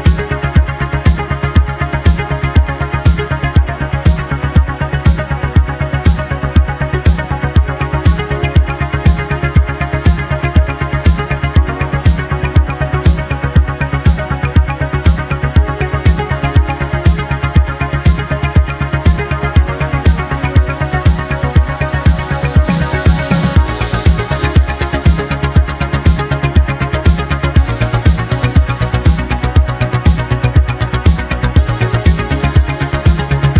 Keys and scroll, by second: 7.3 ctrl+z, 8.5 ctrl+z, 12.9 ctrl+z, 17.8 ctrl+z, 18.0 ctrl+z, 18.2 ctrl+z, 25.4 ctrl+z, 27.8 ctrl+z, 28.7 ctrl+z, 33.4 space.